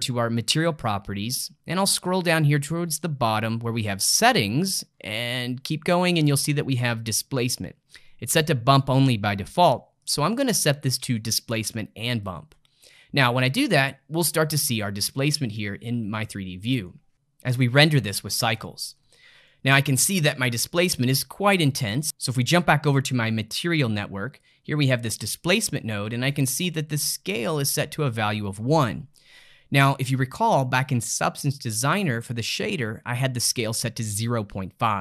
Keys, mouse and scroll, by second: 0.3 click, 1.7-3.9 scroll down 10, 3.9-4.3 scroll down 1, 4.3 click, 4.9-8.4 scroll down 7, 10.0-13.2 drag, 15.1-17.2 middle drag, 18.0-21.9 shift+middle drag, 21.9 click, 24.4 click, 25.8-29.9 middle drag.